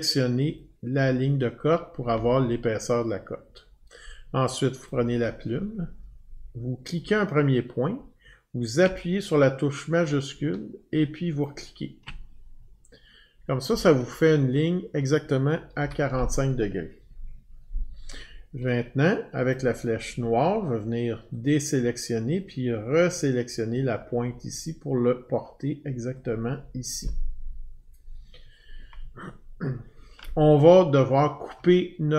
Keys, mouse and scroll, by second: 0.5 click, 4.8 click, 6.9 click, 11.4 shift+click, 15.8 Escape, 19.5 click, 21.4 click, 26.1 click, 30.3-30.7 alt+scroll, 31.1-31.7 alt+scroll.